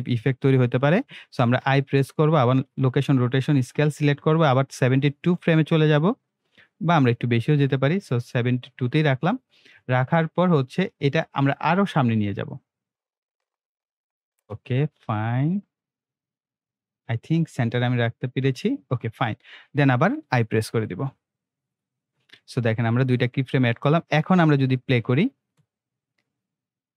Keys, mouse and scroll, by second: 1.5 i, 2.5-10.1 drag, 12.5-20.6 drag, 20.6 i, 21.7-25.4 drag, 25.4 space.